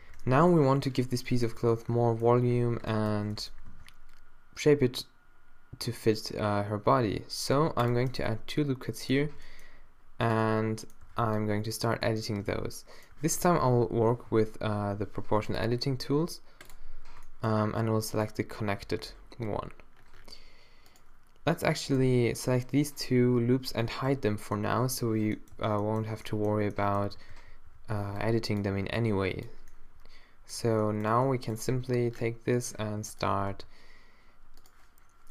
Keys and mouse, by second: 0.0 shift+1, 1.1 z, 1.6 Tab, 3.1 z, 3.7 ctrl+r, 9.3 z, 9.5 middle click, 10.2 middle click, 11.1 a, 11.3 b, 14.3 z, 19.4 g, 24.1 h, 25.5 z, 27.2-28.7 typing, 31.8 g, 33.3 z, 33.6 g.